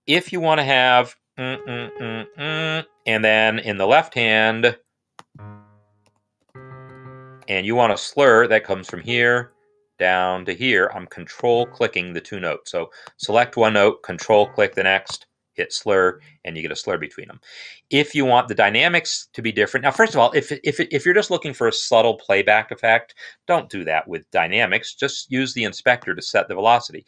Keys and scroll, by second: 0.5-2.2 typing, 6.1-6.8 typing, 7.3 Escape, 15.0 s, 22.7 BackSpace.